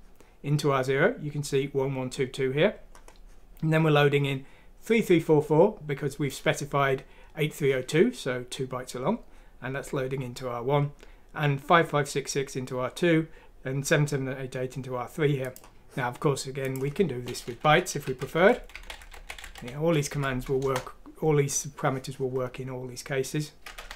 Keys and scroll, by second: 18.0-21.1 typing, 23.8 typing.